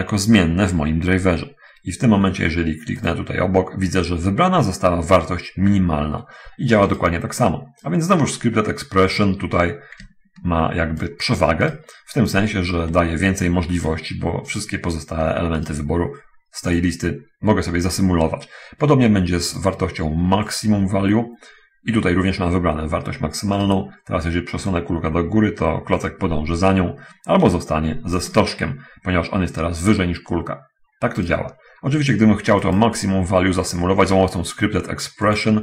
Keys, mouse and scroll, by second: 3.4 click, 7.3-7.6 scroll up 1, 8.1-11.2 drag, 12.1 right click, 12.6-14.1 ctrl+drag, 14.9 right click, 15.6-16.2 right drag, 19.9 click, 20.9 click, 24.0 right drag, 24.8-28.7 drag, 31.6 scroll up 1, 33.1 click, 35.5 click.